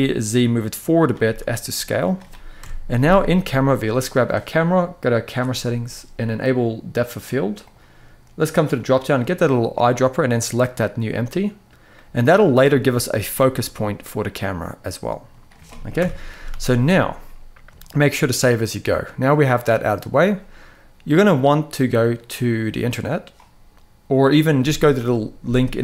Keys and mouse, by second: 1.0 s, 1.7 click, 2.3 KP_0, 3.5 click, 6.8 click, 7.4 click, 8.5 click, 11.7 middle click, 12.3 middle click, 13.6-15.0 middle drag, 15.7 KP_1, 16.2 ctrl+s, 16.3 ctrl+s, 17.5-17.9 shift+middle drag, 18.6 click.